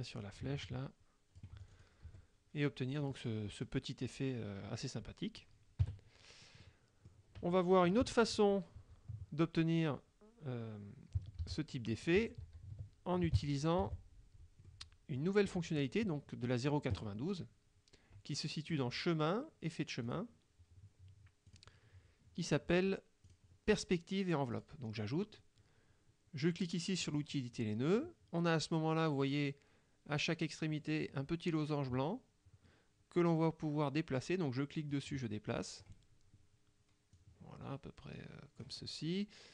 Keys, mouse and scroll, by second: 0.3-2.1 drag, 2.1 F1, 3.1 click, 5.9 KP_Subtract, 6.7 click, 8.4 ctrl+z, 11.5 ctrl+c, 12.3 ctrl+y, 13.9 ctrl+v, 14.8-15.4 drag, 15.9 click, 18.8 click, 20.2 click, 21.6 click, 23.3 click, 24.6 click, 27.1 click, 35.0 click, 37.3-38.9 drag.